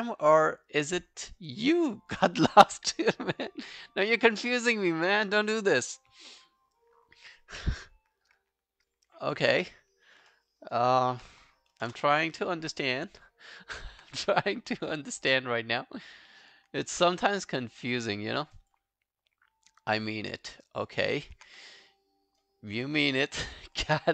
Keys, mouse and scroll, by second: 9.5 scroll down 1, 10.3 alt+middle click, 10.6 alt+right click, 10.9 alt+click, 11.9 ctrl+BackSpace, 13.3 alt+click, 14.1 q, 14.4 right click, 16.7 scroll down 2, 16.9 alt+click, 17.5 alt+right click, 17.7 alt+click, 18.2 alt+right click, 18.6 alt+click, 20.3 alt+click, 20.7 alt+right click, 21.0 alt+click, 21.5 q, 21.7 right click, 23.6 alt+click.